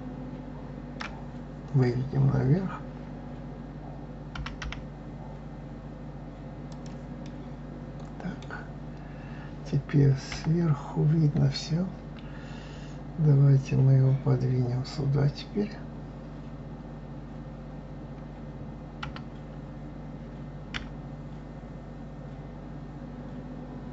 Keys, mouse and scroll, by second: 7.2-10.2 middle drag, 10.3 KP_7.